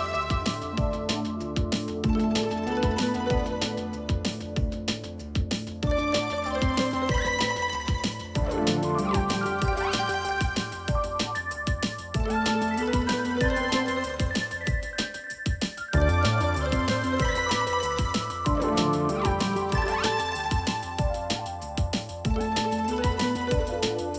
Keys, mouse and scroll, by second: 0.0 v, 1.0 space, 2.2 i, 3.1 double click, 3.3 space, 4.2 v, 4.9-5.2 alt+scroll up 1, 5.5 alt+scroll up 1, 6.1-6.8 alt+scroll up 1, 7.0 alt+scroll down 1, 7.4 space, 7.8-8.2 scroll down 2, 11.3 space, 11.6 double click, 11.7 space, 17.5 alt+scroll up 1, 18.8 ctrl+f, 22.1 ctrl+c, 22.4 ctrl+f.